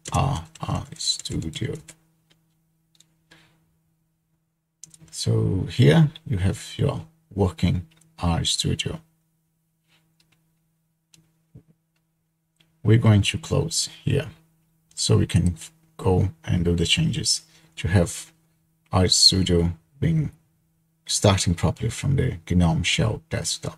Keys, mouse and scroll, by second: 0.0-2.1 typing, 15.5-16.5 drag.